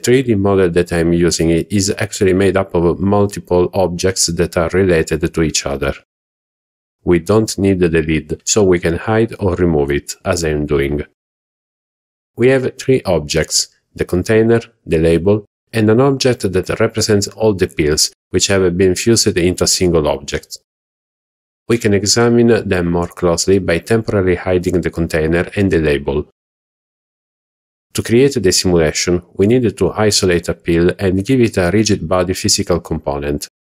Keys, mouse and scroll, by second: 4.7 click, 10.1 click, 12.2 x, 16.4 click, 19.0 click, 22.6 click, 23.2 click, 23.9 click, 28.0 click, 28.9 h, 29.4 click, 29.8 h.